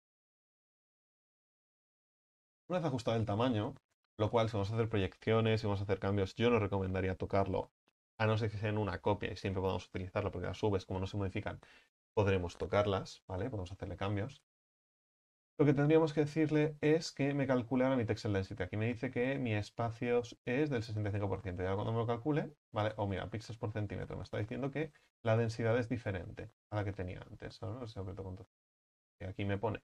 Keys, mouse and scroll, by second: 0.4 scroll down 6, 1.0 right click, 2.4 x, 2.8-3.3 scroll up 6, 3.3 right click, 3.7 middle click, 4.2-6.5 scroll up 3, 6.5-9.2 scroll up 1, 9.2-21.9 scroll up 1, 21.9-28.1 drag, 28.1 ctrl+z.